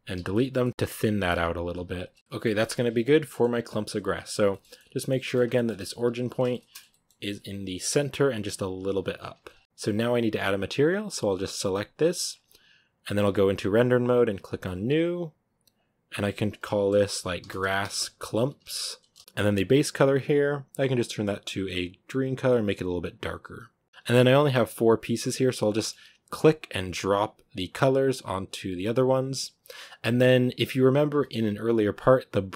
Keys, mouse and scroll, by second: 0.0-1.9 typing, 0.4 scroll down 2, 0.5 middle drag, 2.0 Tab, 2.1 scroll down 3, 2.2-3.3 shift+middle drag, 3.3 scroll up 4, 3.5 middle click, 4.2 right drag, 4.4 shift+middle click, 5.2 scroll up 3, 5.4-5.7 middle drag, 5.7 Tab, 5.9 a, 6.2 a, 6.4-7.1 shift+middle drag, 7.1 g, 7.8 middle click, 8.7 g, 9.3-9.6 scroll down 6, 9.6-11.6 shift+middle drag, 11.6-12.2 right drag, 12.2 scroll up 2, 13.2 z, 15.1-19.2 drag, 20.9 click, 23.9 z, 26.9 click, 28.4 click, 30.2 click, 30.7 scroll down 1.